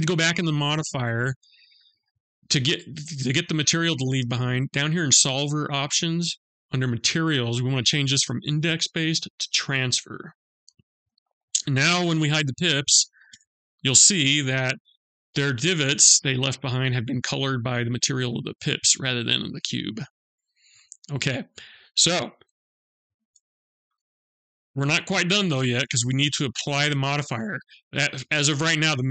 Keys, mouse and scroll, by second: 0.1 click, 5.1 click, 7.6 click, 12.2 click, 12.7 h, 13.4 middle click, 14.1-15.1 scroll up 5, 15.1 middle click, 18.8-20.2 scroll down 8, 20.2 middle click, 22.5 alt+h, 23.3 middle click, 25.7 click.